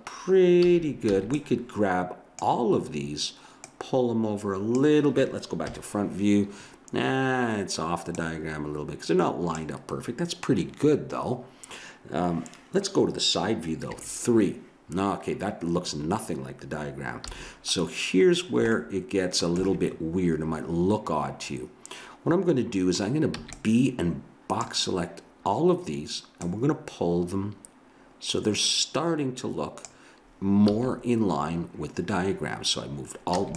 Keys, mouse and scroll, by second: 0.6 a, 1.1 b, 3.6-5.4 drag, 5.6 KP_1, 8.1-13.0 drag, 13.9 KP_3, 17.2 a, 23.4 b, 26.5-28.3 drag, 30.6 a, 33.4 b.